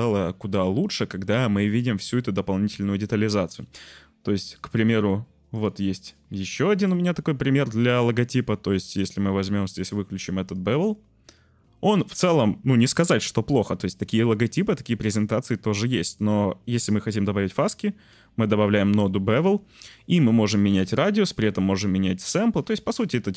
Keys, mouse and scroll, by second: 0.2 shift+click, 0.3 shift+middle click, 2.7 middle click, 6.7 click, 8.1 shift+click, 10.5-10.8 drag, 17.0 click, 17.2-18.1 drag.